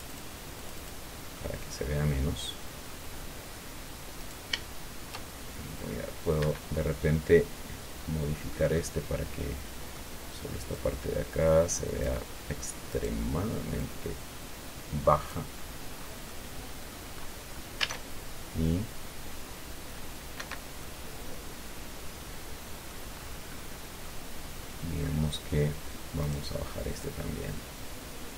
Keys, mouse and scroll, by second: 0.3 click, 0.9 click, 1.7-3.4 middle drag, 3.4-4.6 scroll up 1, 4.6 right click, 6.7 Escape, 7.1-7.4 scroll down 1, 7.4-11.1 middle drag, 11.1-12.6 drag, 13.2 right click, 14.1-15.9 drag, 15.9-16.6 scroll down 1, 16.6 click, 17.6 scroll up 1, 18.1 alt+a, 20.7 Escape, 21.2-23.4 drag, 23.5-24.1 scroll up 1, 24.4-25.6 drag, 26.6 right click, 27.4-28.3 drag.